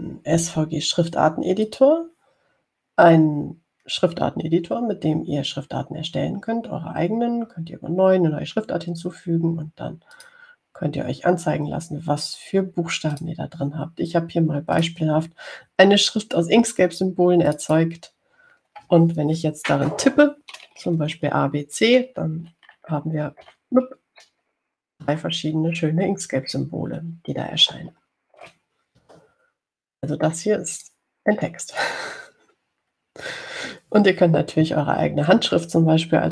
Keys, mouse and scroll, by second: 2.9 click, 11.4 click, 14.4 click, 16.0 click, 18.7 click, 23.2 a, 24.0 b, 24.7 c, 28.8 BackSpace, 29.7 BackSpace, 32.0 click, 33.0 click.